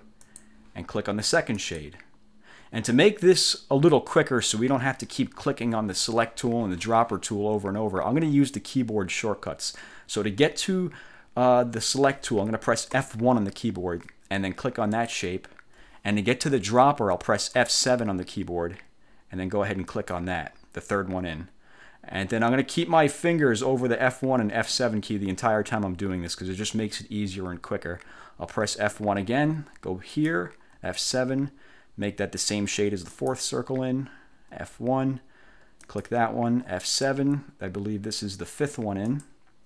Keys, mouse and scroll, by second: 0.3 click, 1.7 click, 13.1 F1, 15.0 click, 17.7 F7, 20.0 click, 28.8 1, 30.2 click, 30.8 F7, 33.2 click, 34.4 F1, 35.9 click, 36.6 F7, 39.2 click.